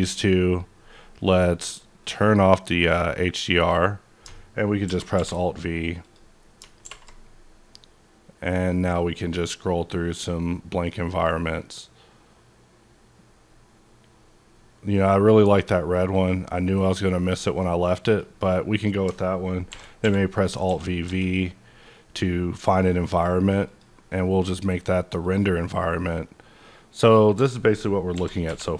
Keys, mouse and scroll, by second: 2.0 click, 2.8 click, 3.5 click, 4.8 alt+v, 5.2 b, 5.7-6.0 scroll up 2, 6.0 click, 6.8 alt+b, 6.8 alt+v, 8.1-8.5 scroll up 1, 8.9-9.5 scroll up 3, 10.0-11.3 scroll up 3, 11.6-12.1 scroll up 2, 13.8-14.3 scroll up 1, 14.3-14.6 scroll down 1, 14.9-15.3 scroll up 2, 16.4 scroll up 1, 18.0 click, 19.7 alt+v, 20.6-21.0 typing, 23.6 click, 25.2 click, 25.2 click, 28.1 alt+v, 28.4 b.